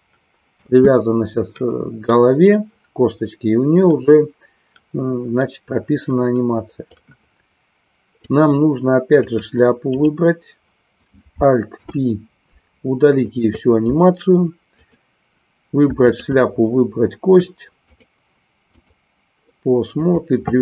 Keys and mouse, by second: 0.6 space, 6.9-8.3 drag, 9.3 click, 10.6 right click, 16.0 shift+click, 17.9-19.0 drag, 20.0-20.6 drag.